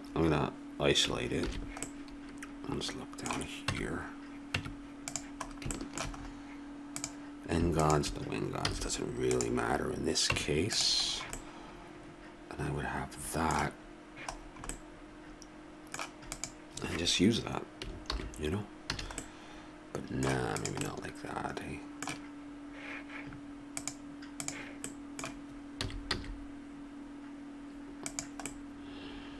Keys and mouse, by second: 1.4 shift+h, 2.0 middle click, 3.7 Tab, 4.6 Tab, 5.4-6.9 middle drag, 6.9 click, 8.7 x, 10.3 Tab, 13.4-14.7 middle drag, 16.3 right click, 16.5-18.1 drag, 18.1 alt+h, 18.9 a, 20.5-22.3 right drag, 24.9 middle click, 25.7 s, 27.2-28.5 middle drag.